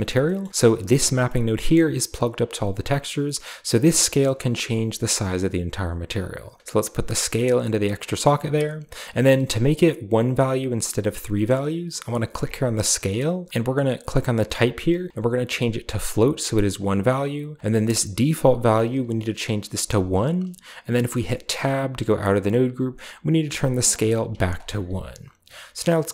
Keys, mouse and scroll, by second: 0.3 middle click, 0.7-2.7 drag, 1.4-2.7 middle drag, 2.9 middle click, 6.4-8.5 drag, 12.2 click, 14.4-15.1 drag, 16.6 click, 18.6 click, 19.5 1, 19.9 click, 21.2-22.6 middle drag, 21.5 scroll, 23.8 click, 24.2 1, 25.7 click.